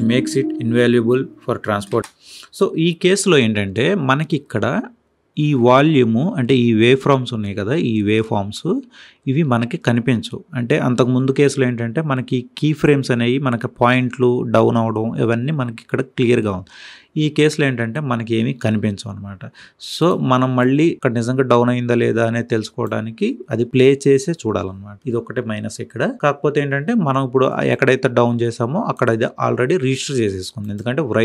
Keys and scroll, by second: 1.8 space.